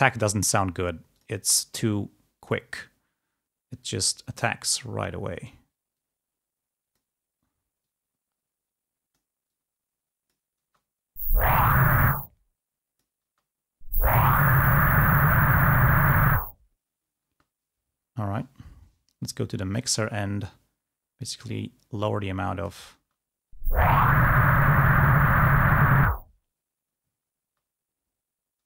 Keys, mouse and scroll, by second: 1.3 click, 2.6 click, 3.9-5.9 drag, 6.0-7.3 drag, 7.9-9.5 drag, 10.8 space, 12.1 space, 12.3-13.4 drag, 13.4 space, 17.4 space, 21.6-23.1 drag, 23.1 space, 27.8 space.